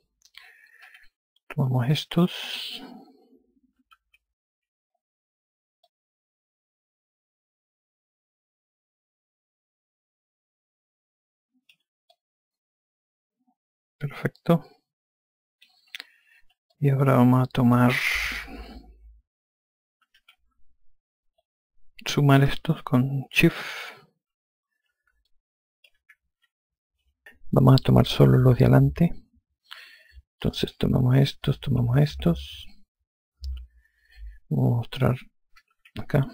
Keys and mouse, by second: 1.2-2.1 typing, 2.3 click, 4.2-5.0 typing, 6.5 click, 12.7 click, 17.3 click, 20.4-21.3 typing, 22.0 click, 25.9 shift+click, 30.8 click, 32.1 shift+click, 34.0 F1, 36.0-36.3 typing.